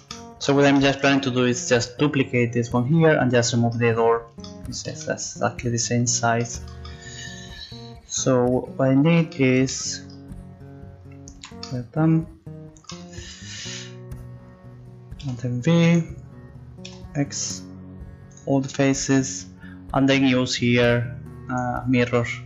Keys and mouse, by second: 3.7-5.5 middle drag, 11.4 z, 15.2 r, 16.9 x, 20.7-22.4 drag.